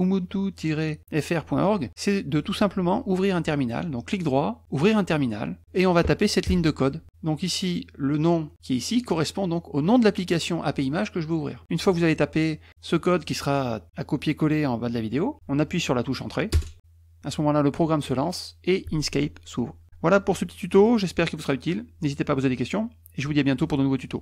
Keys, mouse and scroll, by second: 4.1 right click, 4.7 click, 8.1 click, 16.5 Return.